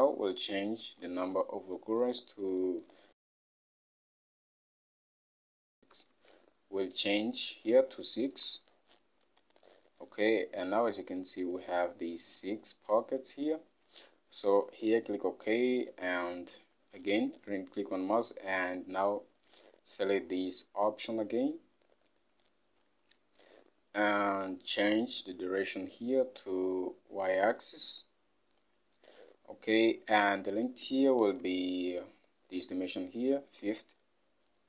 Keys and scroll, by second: 0.0 ctrl+Tab, 1.2 ctrl+Tab, 8.6 typing, 13.1 6, 31.3 ctrl+Tab.